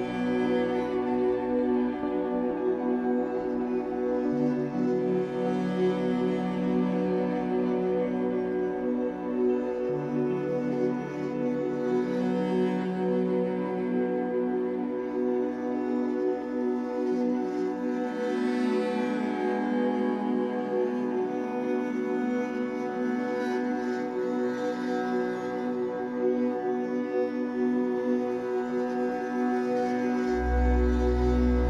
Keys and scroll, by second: 2.3 Escape, 4.3 m, 5.6 Escape, 12.0 alt+shift+x, 12.8 Escape, 16.7 F8, 29.9 ctrl+z.